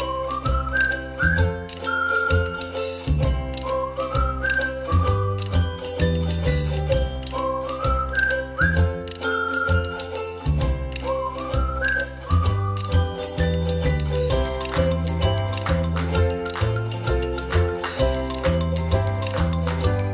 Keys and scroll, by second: 1.0 ctrl+z, 3.9 ctrl+-, 5.2 ctrl+=, 5.4 ctrl+=, 5.8 space.